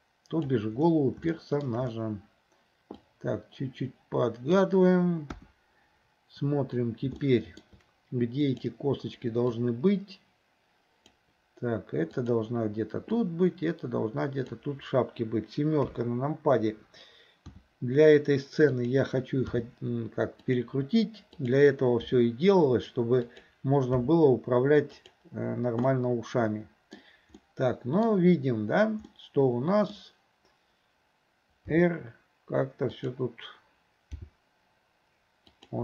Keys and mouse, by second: 1.4 shift+middle drag, 3.0-4.7 drag, 5.4 KP_1, 7.3-7.7 middle drag, 8.4 click, 9.7-11.2 drag, 12.2 click, 13.4-14.7 drag, 15.9 KP_7, 17.6 r, 19.6 g, 21.4 click, 22.1 r, 24.1 g, 25.9-27.0 middle drag, 27.4-28.1 middle drag, 29.2 middle click, 31.7 r, 34.3 g.